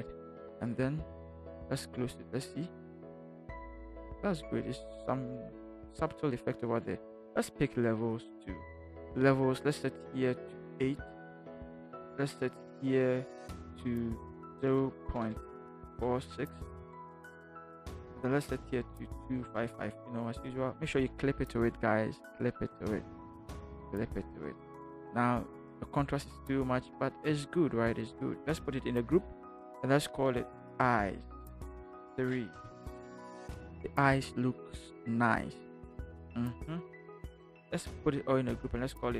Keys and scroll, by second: 11.2 8, 14.5 0, 19.5 2, 19.6 5, 28.9 ctrl+shift+g, 30.5-32.6 typing, 38.0 ctrl+g.